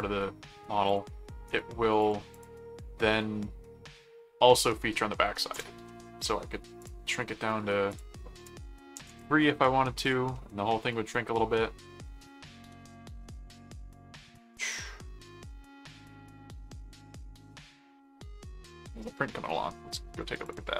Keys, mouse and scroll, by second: 0.9 click, 1.4 right click, 2.0 click, 2.8 middle click, 4.2 middle click, 5.8 middle click, 6.8 click, 7.9 click, 10.0 click, 10.3-11.4 middle drag, 12.2-13.3 middle drag, 13.8 middle click, 14.5 middle click, 15.6 middle click, 20.4 click.